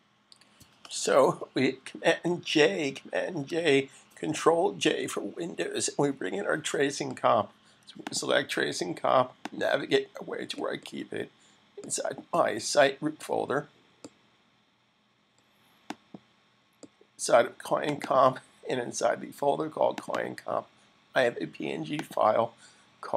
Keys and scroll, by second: 3.3 super+j.